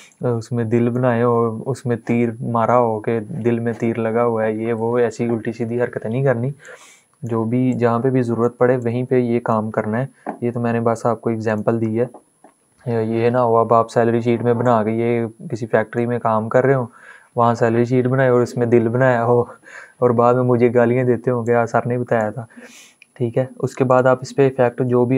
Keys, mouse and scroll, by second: 6.3 click, 6.4-11.1 drag, 14.6-15.9 drag, 21.1-23.6 drag.